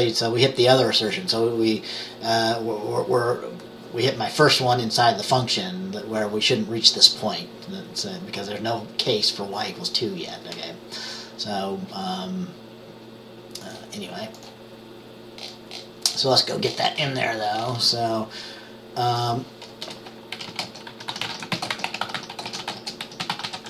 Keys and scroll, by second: 19.9 Return, 20.4-23.6 typing.